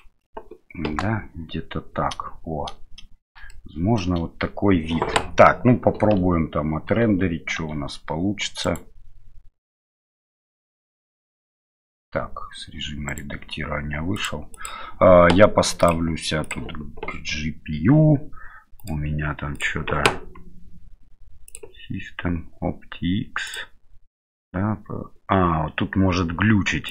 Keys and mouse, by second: 0.9 KP_0, 3.6 middle click, 6.9 Tab, 7.6 Tab, 13.1 right click, 14.1 click, 14.5 click, 15.8-16.8 drag, 18.8-19.7 drag.